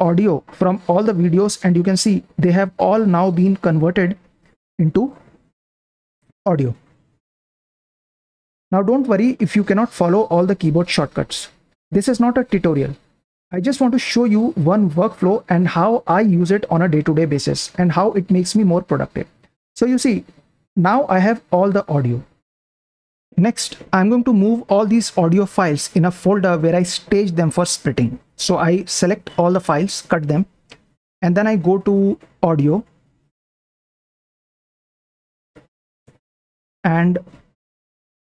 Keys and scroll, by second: 2.7 Down, 3.4 Down, 4.1 Down, 4.8 Down, 5.4 Down, 6.2 Down, 8.1 super+Print, 8.2 super+Print, 22.8 super+Print, 28.3 v, 29.7-33.4 typing, 34.6-35.0 typing, 36.0 Return, 36.6 Down, 37.1 Down, 37.2 Down, 37.9 Up.